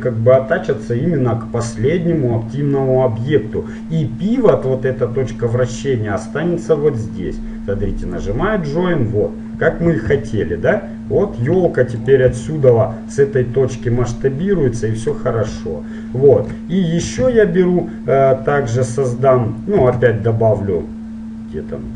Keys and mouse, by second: 8.1-10.1 right drag, 10.3 r, 12.5 s, 15.7-16.7 middle drag, 20.0 shift+a.